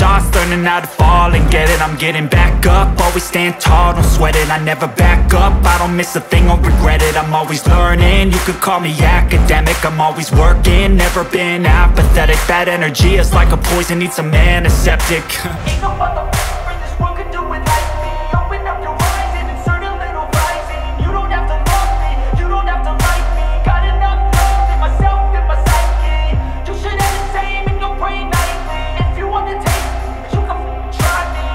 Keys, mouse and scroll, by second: 0.4 click, 2.5 middle click, 2.6 scroll, 3.8 right click, 6.0 click, 13.2 click, 17.2 click, 20.0 click, 21.4 click, 23.0 click, 24.2 typing, 25.3 Return, 27.9 click, 28.1 typing.